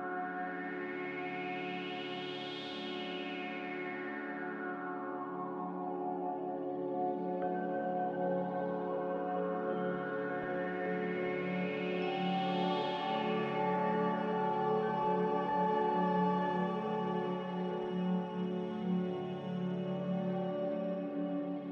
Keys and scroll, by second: 18.4 r.